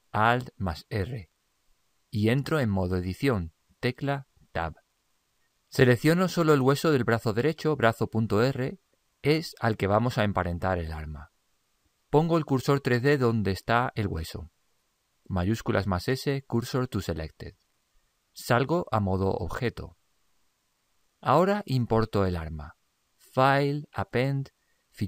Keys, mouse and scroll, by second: 0.5 alt+r, 3.8 click, 8.1-10.1 right drag, 15.8 shift+s, 20.2 click, 23.4 click.